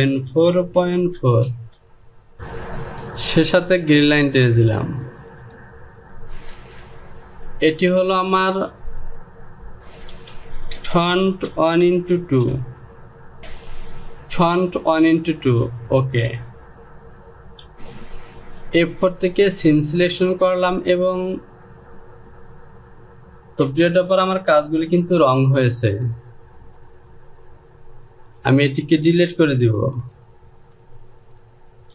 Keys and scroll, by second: 0.3 KP_Decimal, 0.8 KP_4, 1.0 Down, 1.3 KP_Decimal, 1.7 KP_4, 2.0 Down, 6.2 Home, 7.0 e, 9.8 typing, 11.3-13.6 typing, 13.4 Right, 25.6 j, 31.1-31.7 typing.